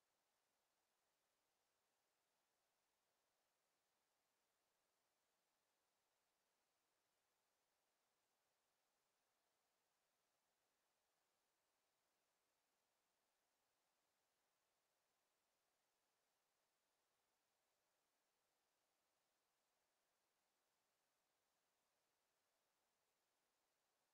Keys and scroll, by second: 7.1 Return, 9.1 ctrl+z, 23.5 Delete.